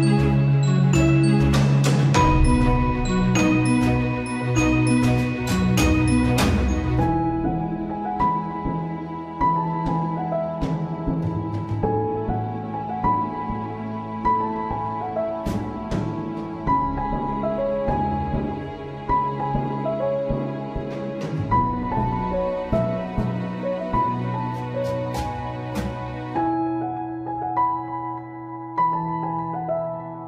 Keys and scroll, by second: 3.1 ctrl+s, 8.1 ctrl+s, 9.3 ctrl+space, 12.4 ctrl+z, 15.7 ctrl+z, 18.0 ctrl+z, 22.9 ctrl+z, 26.3 ctrl+z.